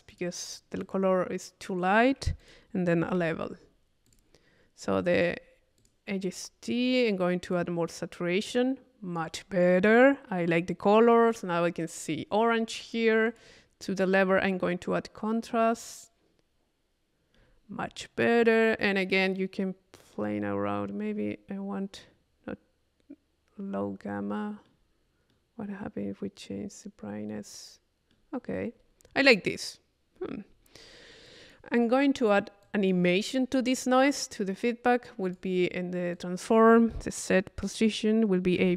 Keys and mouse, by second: 0.1 click, 0.8 right click, 1.1 middle click, 2.4 click, 4.1 click, 5.2 click, 5.8 click, 7.4-9.6 drag, 11.1 click, 12.7-13.9 drag, 14.3 middle click, 17.5 middle click, 19.2-22.7 middle drag, 25.3-28.4 middle drag, 30.5 middle click, 31.3 click, 32.2-33.4 drag, 35.3 click, 36.1-37.7 drag.